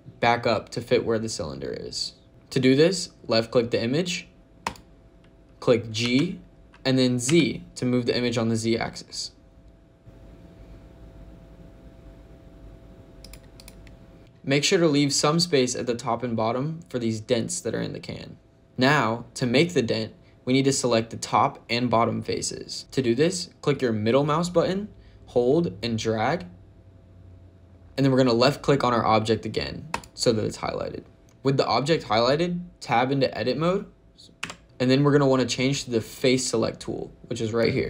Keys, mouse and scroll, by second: 4.5 click, 5.9 g, 7.2 z, 13.1 click, 13.5 click, 25.4 middle click, 29.8 click, 34.3 Tab.